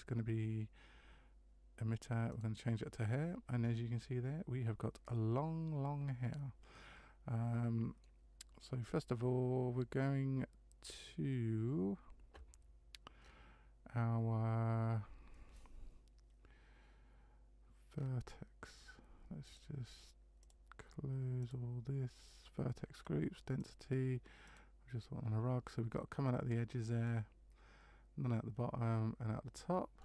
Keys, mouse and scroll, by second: 2.4 click, 3.6 scroll down 4, 6.9 middle click, 10.8-11.2 scroll down 6, 13.2-13.9 scroll down 3, 17.9-18.8 scroll down 5, 19.4 click, 20.4 click, 21.6 click, 22.9-23.2 scroll down 4, 23.6 click, 27.0 middle click.